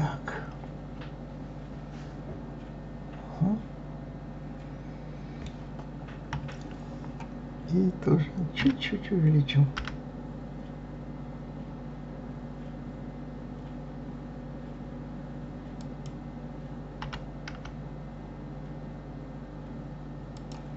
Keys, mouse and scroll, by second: 6.3 KP_3, 8.6 s.